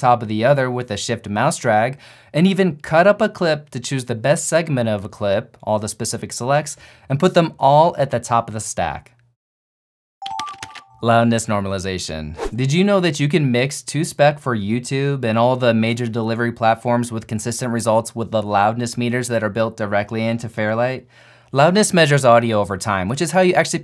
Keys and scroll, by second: 3.7 super+b, 8.1 super+b, 8.7 shift+super+b.